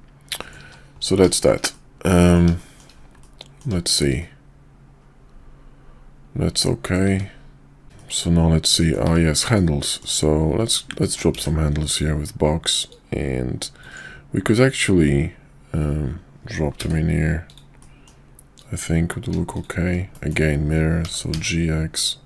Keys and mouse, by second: 0.3 middle drag, 0.6 shift+2, 1.7 middle click, 2.6 shift+middle click, 3.2-3.6 middle drag, 3.8 shift+middle click, 4.2-6.9 middle drag, 7.9 middle click, 8.7 middle drag, 9.4 KP_5, 9.9 shift+middle click, 11.0 shift+middle click, 11.3 d, 12.9-14.0 drag, 14.8-17.6 drag, 17.8 middle drag, 20.1 middle click, 21.0 g.